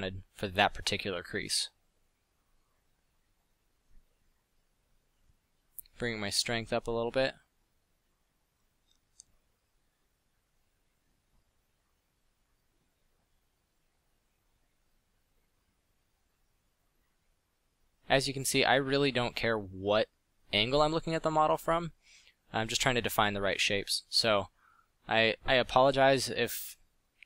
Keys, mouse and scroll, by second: 1.8 f, 7.6 f, 10.3 f, 15.6 f, 27.0 f.